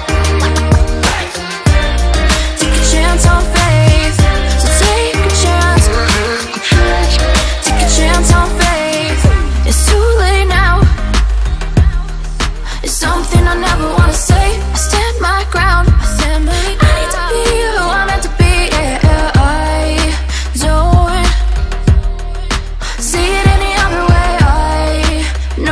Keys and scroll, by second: 8.1 ctrl+n, 23.5 ctrl+c, 25.5 ctrl+v.